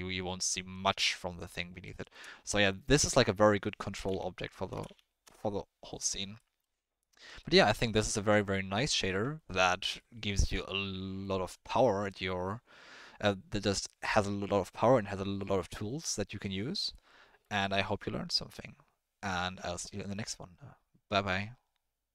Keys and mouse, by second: 0.9-1.6 middle drag, 2.0 shift+middle click, 3.0-5.3 drag, 6.4-6.7 middle drag, 7.5 middle click, 7.9 middle click, 8.9 middle click, 10.0-11.2 middle drag, 16.9-17.4 middle drag.